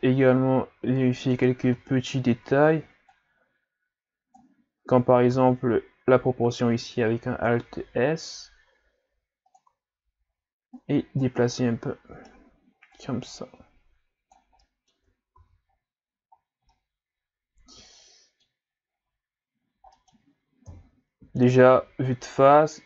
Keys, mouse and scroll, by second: 1.6 Tab, 3.1-5.3 drag, 5.3 alt+s, 8.3 click, 10.8 click, 11.6-12.9 middle drag, 12.9-14.6 drag, 14.6 middle click, 15.0 Tab, 15.4 a, 15.7-16.7 scroll down 5, 16.7-18.9 middle drag, 18.9 scroll down 4, 20.0 middle click, 20.7 KP_1.